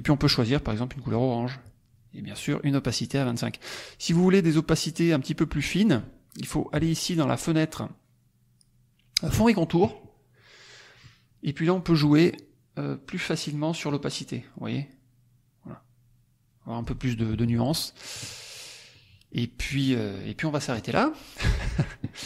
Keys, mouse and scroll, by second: 0.9 click, 2.4 right click, 3.2 click, 9.3 click, 13.8-16.9 drag, 17.2 click, 17.4 middle click, 18.5 click, 18.9-19.4 middle drag, 19.6 middle click, 20.7 click, 21.3 click.